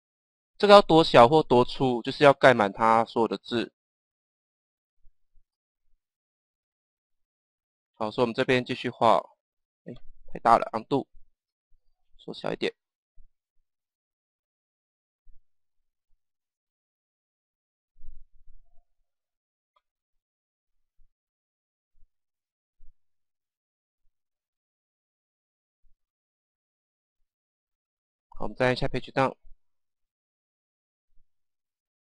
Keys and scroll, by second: 5.3 Page_Down, 7.8 Page_Down, 10.7 ctrl+z, 29.0 Page_Down.